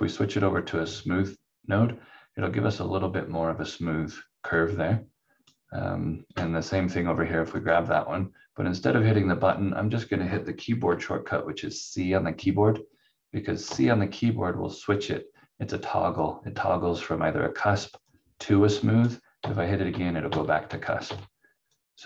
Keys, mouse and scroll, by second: 0.6 click, 4.5 click, 13.6 c, 16.2 click, 19.4 c, 19.9 c, 20.6 c, 21.0 c, 21.7 click.